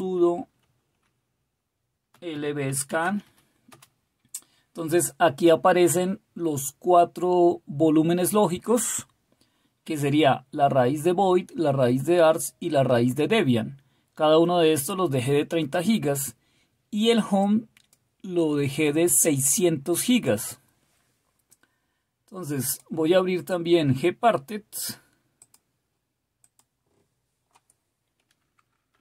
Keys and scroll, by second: 0.0-0.1 typing, 1.9-3.8 typing, 28.7-29.0 typing.